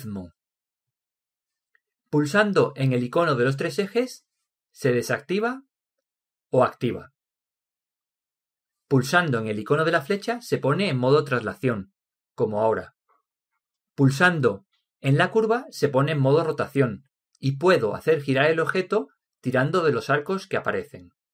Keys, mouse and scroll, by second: 5.0 click, 11.8 click, 16.9 click, 18.9 click, 20.8 click, 21.0 click.